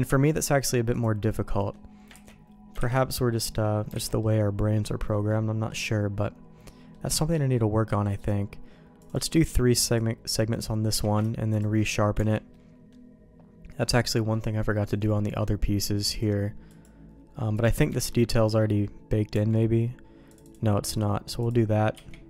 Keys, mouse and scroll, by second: 0.9 click, 1.6 middle click, 2.2 ctrl+t, 2.8 alt+j, 3.1 middle click, 4.0 alt+a, 4.2 middle click, 5.3 middle click, 5.8-6.9 middle drag, 7.1 Tab, 8.1 click, 9.0 click, 9.8 click, 10.9 q, 12.1 Tab, 12.5 middle click, 13.8 middle click, 14.9 Tab, 15.3 middle click, 16.1 click, 16.7 click, 17.5 click, 17.9 Tab, 18.2 middle click, 19.3 Tab, 20.3-21.5 drag, 21.9 q.